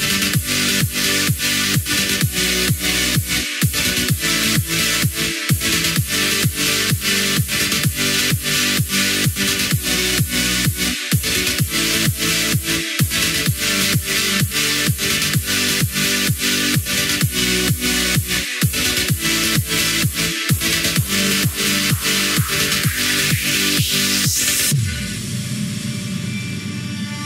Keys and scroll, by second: 22.1 ctrl+z.